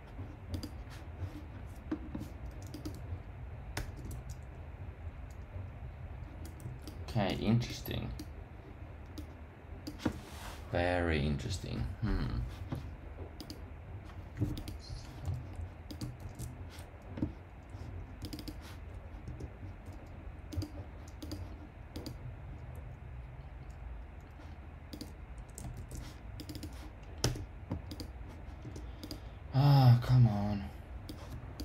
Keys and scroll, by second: 3.7 super+r, 19.2 Tab, 27.2 Tab, 28.6 Tab.